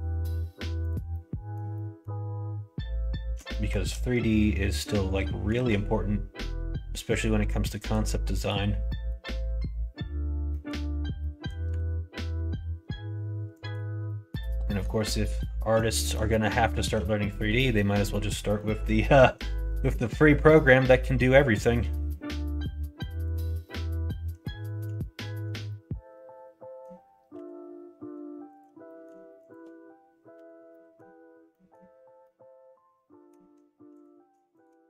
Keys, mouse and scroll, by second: 1.0 middle click, 1.7 middle click, 3.4 shift+middle click, 5.5 ctrl+r, 8.8 middle click, 10.5 middle click, 11.2 middle click, 11.7 ctrl+r, 14.1 middle click, 14.6 middle click, 15.9 shift+middle click, 16.8 ctrl+z, 17.3 middle click, 17.7 middle click, 18.5 middle click, 19.8 middle click, 20.4 middle click, 21.3 middle click, 22.0 middle click, 23.6-24.7 middle drag, 25.2 shift+click, 25.6-26.7 middle drag, 27.3 f, 28.5 click, 28.9 middle click, 29.4 shift+click, 30.6 middle click, 31.4 middle click, 32.2-33.2 middle drag, 33.9 click, 34.5 shift+click.